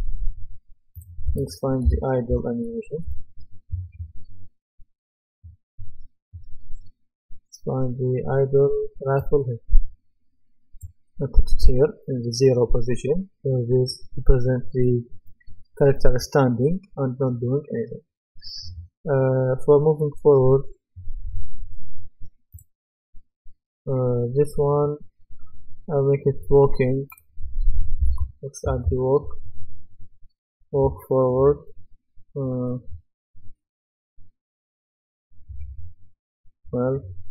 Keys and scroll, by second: 2.0-3.5 typing, 27.8-29.3 typing.